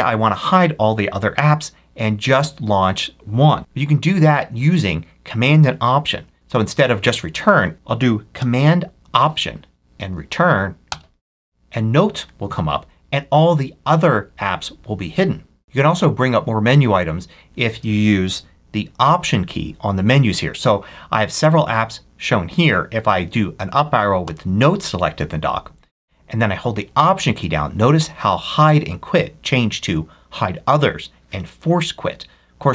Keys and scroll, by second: 3.6 Left, 7.4 Right, 10.8 alt+super+Return, 18.1 ctrl+F3, 24.1 Up.